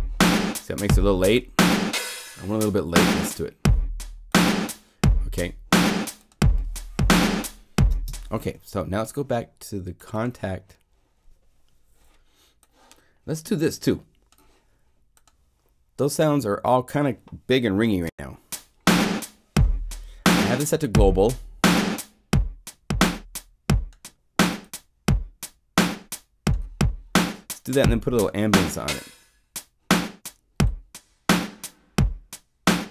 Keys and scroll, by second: 17.9 0, 18.0 Home.